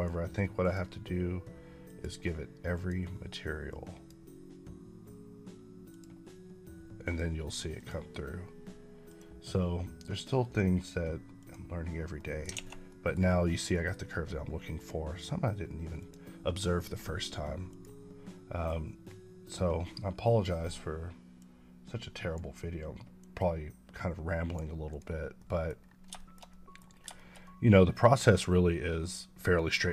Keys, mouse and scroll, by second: 0.5 click, 3.9 click, 12.0 middle click, 12.4 alt+a, 13.1 middle click, 13.6 middle click, 13.8 scroll up 3, 14.6 click, 18.8 click, 21.6 click, 23.4 click, 24.9 click, 25.2 middle click, 26.1 shift+middle click, 26.8 scroll down 1, 27.0 shift+middle click.